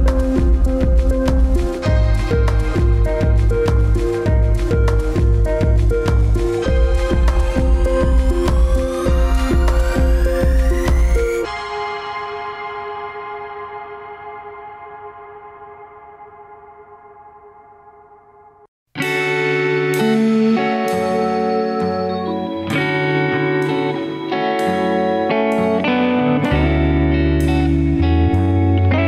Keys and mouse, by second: 0.1-1.4 middle drag, 4.1 click, 5.0 middle click, 6.1 g, 12.7-13.6 middle drag, 14.2 ctrl+z, 14.8-16.2 middle drag, 20.1 ctrl+z, 20.5 ctrl+z, 23.0-23.5 drag, 23.9 click, 25.9 alt+shift+click, 27.3 alt+shift+click.